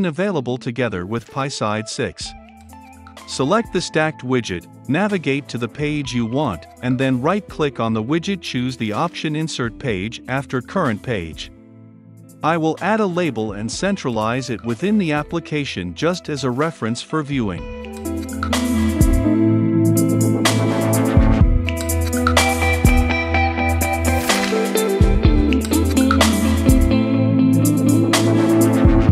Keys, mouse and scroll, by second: 0.2-1.8 drag, 1.8-4.3 right drag, 4.3-6.1 drag, 6.1-8.5 right drag, 8.5-11.6 drag, 11.5-12.7 typing, 11.6 scroll up 2, 13.2-15.9 drag, 16.8 click, 17.2-19.2 right drag, 19.2-21.2 drag, 23.8-29.1 drag.